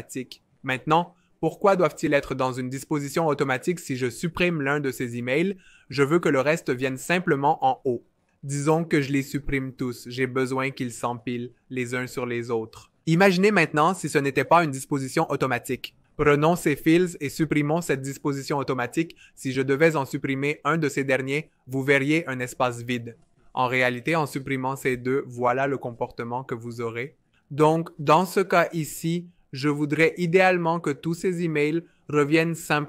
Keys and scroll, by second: 5.4 BackSpace, 10.0 BackSpace, 14.0 super+z, 21.7 BackSpace, 22.9 super+z, 24.8 BackSpace.